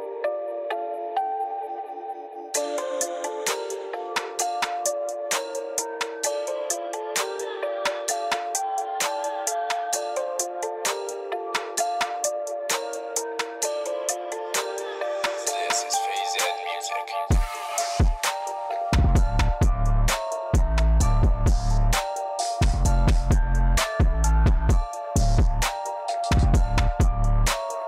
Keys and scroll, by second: 0.0-0.4 typing, 1.7-2.5 typing, 7.8 8, 15.2-15.7 typing, 15.7 Return, 16.1 Return.